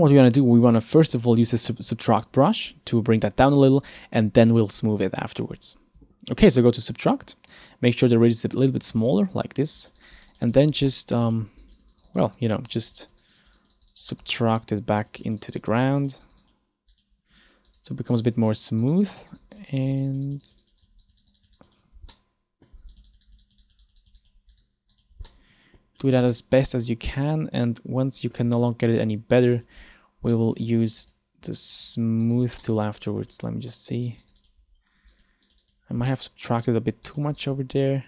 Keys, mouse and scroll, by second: 0.7 scroll up 1, 0.9 middle click, 1.6 scroll up 2, 2.7 click, 8.0 click, 9.9 click, 10.1 click, 10.3 click, 10.4 click, 10.6 click, 10.7 click, 11.0 middle click, 11.7 click, 11.9 click, 12.0 click, 12.2 click, 12.4 click, 12.5 click, 12.8 click, 12.9 click, 13.1 click, 13.3 click, 13.5 click, 13.7 click, 13.9 click, 14.0 click, 14.2 click, 14.4 click, 14.6 click, 15.1 click, 15.3 click, 15.5 click, 15.7 click, 15.9 click, 16.1 click, 16.3 click, 16.5 click, 17.0 click, 17.7 click, 18.2 click, 18.6 click, 19.0 click, 19.2 click, 19.4 click, 19.6 click, 19.8 click, 20.0 click, 20.2 click, 20.4 click, 20.5 click, 20.7 click, 20.9 click, 21.1 click, 21.3 click, 21.5 click, 21.7 click, 21.9 click, 22.2 middle click, 23.0 click, 23.2 click, 23.4 click, 23.6 click, 23.8 click, 23.9 click, 24.1 click, 24.3 click, 24.6 click, 25.0 click, 25.3 middle click, 26.3 middle click, 27.7 middle click, 27.9 middle click, 29.7 click, 30.4 middle click, 31.1 click, 31.9 click, 32.3 click, 32.7 middle click, 34.1 click, 34.3 click, 34.5 click, 35.2 click, 35.5 click, 35.7 click, 36.1 middle click, 37.1 click, 37.5 click.